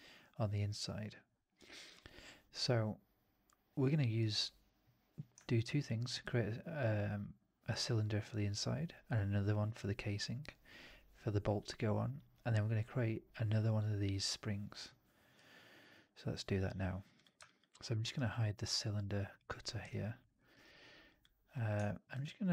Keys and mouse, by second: 17.0 middle drag, 17.3 alt+drag, 17.8 alt+middle click, 17.9 alt+right click, 19.2 click, 19.8-20.1 alt+drag, 20.2 alt+middle drag, 20.4 alt+right click, 21.0-21.6 drag.